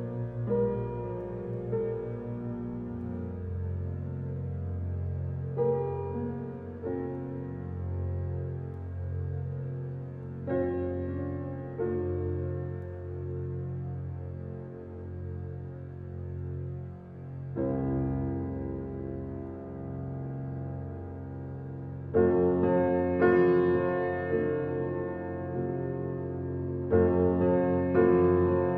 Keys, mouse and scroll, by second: 1.5 g, 2.8 alt+middle drag, 3.3 scroll down 5, 3.8 g, 5.1-5.6 middle drag, 5.6 scroll up 1, 5.8-6.2 shift+middle drag, 6.2 alt+z, 6.5-7.2 shift+middle drag, 7.2 s, 9.5 shift+middle drag, 9.7-10.8 scroll up 7, 9.9 shift+middle drag, 10.8 g, 13.1 alt+middle click, 13.4-13.9 scroll down 8, 13.9 shift+middle click, 14.6 shift+d, 16.0 scroll down 2, 16.3-16.7 middle drag, 16.7 drag, 17.0-17.6 scroll up 4, 17.6 click, 19.4 click, 20.3-20.9 drag, 23.4 click, 24.8 x, 25.9 ctrl+z, 26.5-28.0 middle drag.